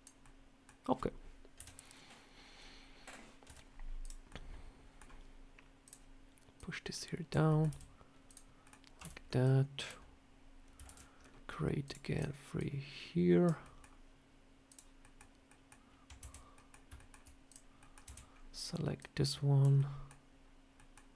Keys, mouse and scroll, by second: 0.1 middle click, 1.4 KP_7, 3.3 z, 4.1 scroll up 1, 4.1 middle click, 4.9 scroll down 1, 5.7 click, 6.4 click, 7.3 middle click, 7.5 e, 8.5 middle click, 8.9 a, 9.3 click, 10.7 ctrl+r, 12.4 click, 13.5 middle click, 14.6 click, 14.9 middle click, 15.3 middle click, 16.0 KP_Divide, 16.4 middle click, 16.4 /, 16.8 shift+middle click, 17.0 shift+middle click, 17.3 click, 17.7 middle click, 17.8 scroll down 1, 17.9 /, 18.2 scroll up 2, 18.8 click, 19.6 middle click, 20.6 middle click.